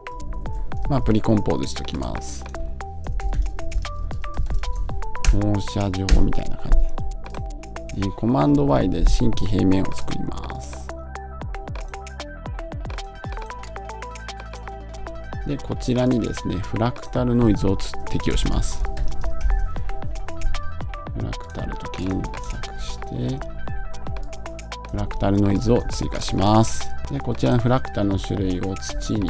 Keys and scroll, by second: 5.1 Return.